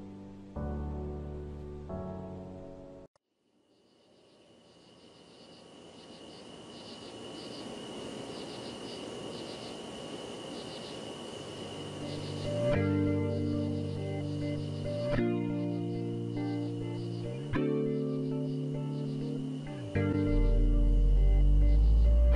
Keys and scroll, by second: 0.1 Return, 11.4 typing, 12.4 ctrl+a, 18.2 Down, 18.4 Down, 20.1 Down, 20.2 Down.